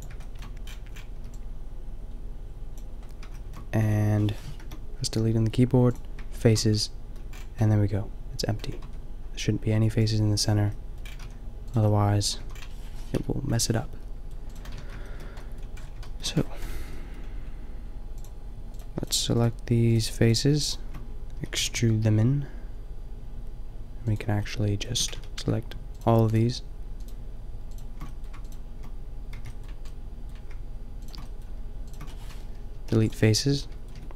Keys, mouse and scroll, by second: 1.2 b, 4.6 Return, 5.0 Delete, 8.9 Tab, 11.2 a, 12.4 a, 13.1 KP_5, 14.8 Tab, 15.7 middle click, 18.8 middle click, 21.4 e, 24.1-25.8 drag, 25.1 ctrl+z, 28.2-29.5 drag, 29.4 b, 30.1 middle click, 31.0-32.6 middle drag, 32.5 Return, 32.7 Delete, 34.0 Tab.